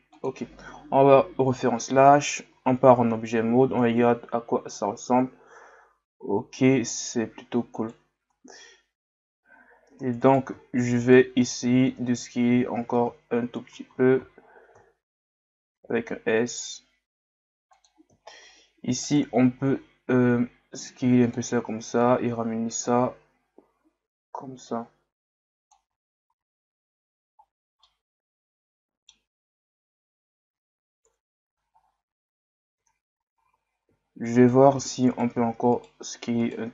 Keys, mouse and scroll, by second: 1.0 KP_Divide, 1.9 Tab, 2.8-3.1 scroll down 1, 4.8 scroll up 1, 5.9-7.2 scroll up 9, 7.8 right click, 9.9 Tab, 10.2 right click, 11.0 shift+right click, 11.4 shift+right click, 11.9 Tab, 18.2-19.0 scroll up 1, 19.0 alt+right click, 19.7 s, 22.0-25.1 drag, 26.5-27.2 scroll down 1, 27.8-30.9 middle drag, 31.1 KP_1, 31.8 scroll up 1, 32.7 Tab, 34.4 right click, 34.8 Tab, 35.1 right click, 35.7 shift+right click, 36.4 shift+right click.